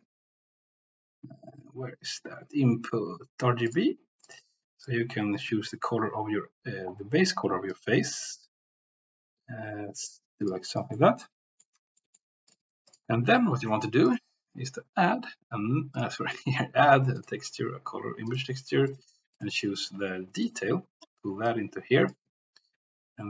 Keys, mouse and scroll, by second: 4.7 click, 7.7-10.5 drag, 10.7 click, 11.0-11.7 middle drag, 12.0 middle click, 12.5 click, 14.1-15.7 drag, 15.9 drag, 16.3-18.9 drag, 19.4-20.5 drag, 21.5-22.2 drag.